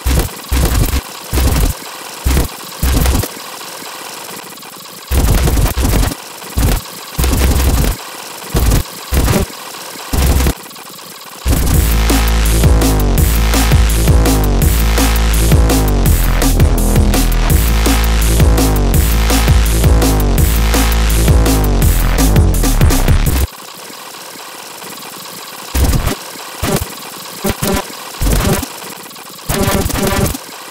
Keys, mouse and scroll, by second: 0.0-3.2 typing, 0.3 click, 0.4 click, 1.1 alt+click, 1.2 click, 1.9 click, 2.5 ctrl+click, 2.9 scroll down 2, 3.3 ctrl+click, 3.8 Delete, 3.8 click, 4.1 click, 4.5 click, 4.6 click, 4.7-11.4 typing, 4.8 alt+click, 6.1 click, 6.3 alt+click, 6.9 scroll down 2, 7.0 right click, 7.1 click, 8.0 right click, 8.2 ctrl+click, 8.5 scroll up 2, 8.9 alt+click, 9.4 scroll down 2, 9.9 click, 10.1 click, 11.5 scroll up 2, 12.2-12.5 scroll down 2, 23.4 space, 23.4 right click, 23.7 scroll down 2, 24.3 right click, 24.4 click, 24.7 right click, 24.9 ctrl+click, 25.2 click, 25.3 click, 25.6 click, 25.7-30.7 typing, 26.1 scroll down 2, 26.3 click, 26.6 scroll up 2, 28.5 scroll down 2, 28.8 middle click, 29.4 middle click, 30.1 scroll down 2, 30.4 click, 30.6 click.